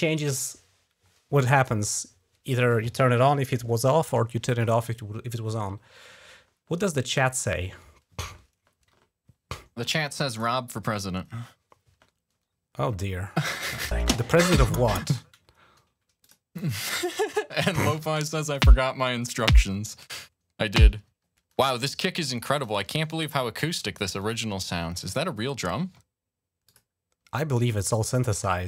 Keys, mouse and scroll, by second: 7.1 click, 10.1 click, 12.3-12.8 scroll up 2, 13.2-13.7 scroll down 2, 13.7 space, 14.8 space, 16.0 click, 16.6 click, 17.8 typing, 21.4 space, 21.7 click, 22.3 click, 24.0 click, 24.8 click, 25.0 click, 26.5 click.